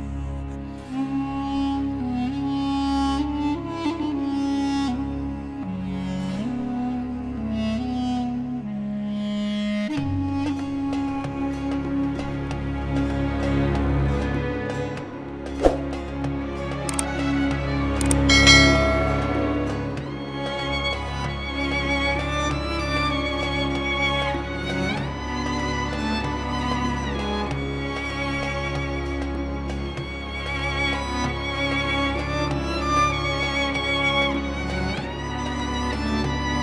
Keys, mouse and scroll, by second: 2.5 click, 4.8 ctrl+scroll down 1, 6.4-12.2 drag, 12.9 ctrl+scroll up 1, 13.7 space, 13.9 click, 14.8 ctrl+alt+scroll down 1, 15.6 space, 15.8 click, 16.1 space, 16.7-36.1 drag, 36.1-36.6 drag.